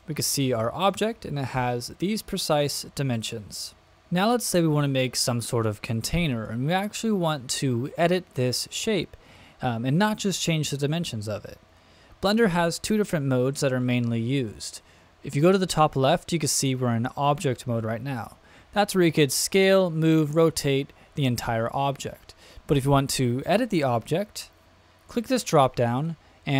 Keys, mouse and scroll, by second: 0.0-0.9 middle drag, 25.0-26.5 drag.